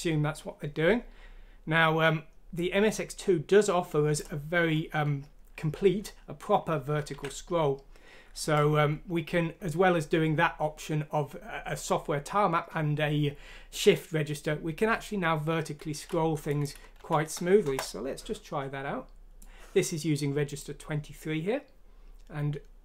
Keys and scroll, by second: 7.1 ctrl+q, 16.9 F6, 17.6 Return.